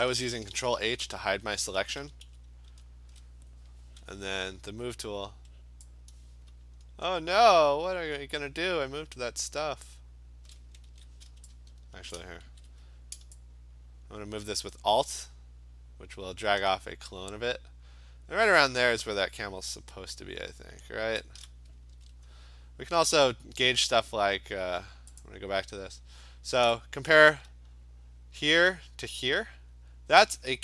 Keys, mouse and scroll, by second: 0.3 ctrl+h, 0.6 ctrl+h, 0.8 ctrl+h, 1.1 ctrl+h, 1.4 ctrl+h, 1.6 ctrl+h, 1.8 ctrl+h, 2.1 ctrl+h, 2.3 ctrl+h, 2.7 ctrl+h, 4.0 v, 9.9 shift+click, 10.9 ctrl+z, 12.2 shift+click, 12.5 ctrl+z, 21.3 click, 22.0 ctrl+d, 25.3 click, 28.0 click.